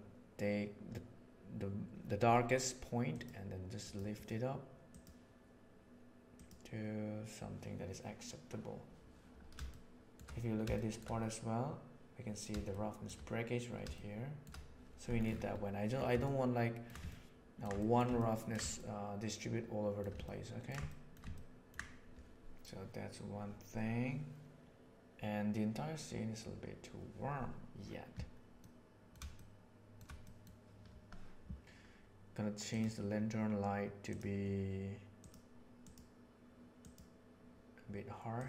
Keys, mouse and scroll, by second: 9.7-10.1 shift+middle drag, 10.7-11.0 shift+middle drag, 12.7 shift+middle drag, 13.9-14.4 shift+middle drag, 16.3 shift+middle click, 17.1-17.6 ctrl+middle drag, 17.8 shift+middle click, 18.1 ctrl+middle click, 18.8-20.0 shift+middle drag, 20.2 ctrl+middle click, 20.8 shift+middle click, 21.2 ctrl+middle click, 34.0 right click.